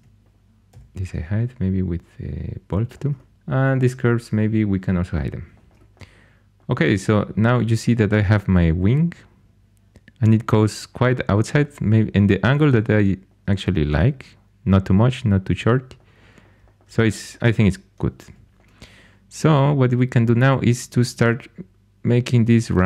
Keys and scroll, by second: 0.6 h, 18.2 2, 20.1 2.